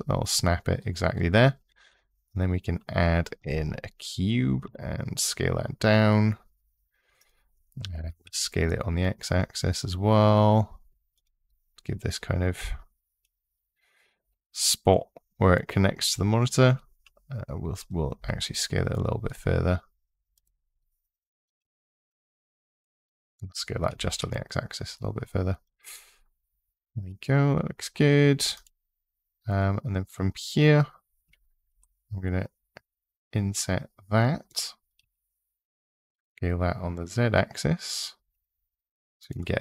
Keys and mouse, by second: 1.5 shift+a, 4.4 s, 6.9 click, 7.8 s, 8.0 x, 10.9 click, 12.7 middle click, 15.4 click, 16.8 x, 17.9 s, 20.1 click, 22.4 ctrl+z, 23.7 s, 24.0 x, 25.4 click, 31.5 i, 34.8 s, 36.1 z, 39.0 click, 39.4-39.6 middle drag.